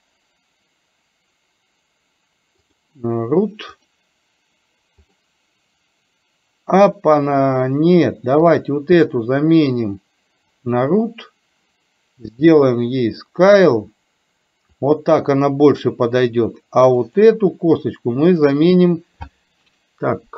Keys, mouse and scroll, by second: 3.9 click, 5.2-7.7 middle drag, 10.6 click, 12.6-17.4 drag, 18.4-20.3 drag.